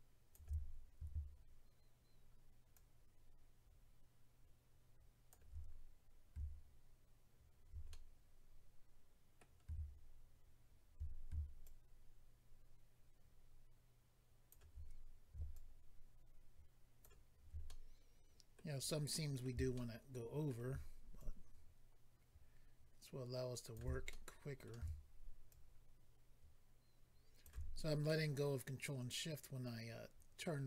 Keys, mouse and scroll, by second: 2.7 ctrl+click, 7.9 middle click, 11.6 ctrl+click, 15.5 ctrl+click, 17.6 middle click, 19.1 middle click, 19.7 shift+middle click, 20.5 middle click, 21.2 ctrl+click, 24.1 middle click, 25.5 ctrl+click, 28.0 middle click.